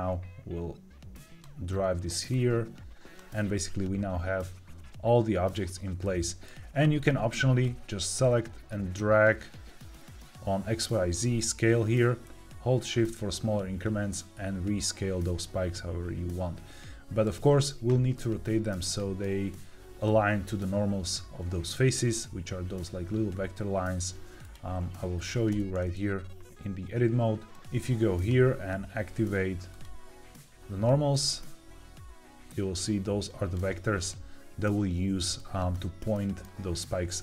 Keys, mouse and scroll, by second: 2.2 click, 5.9 shift+middle click, 7.6-17.1 drag, 18.1 middle click, 18.8 shift+middle click, 24.3 click, 25.4 Tab, 28.1-34.7 drag, 35.3-36.3 middle drag.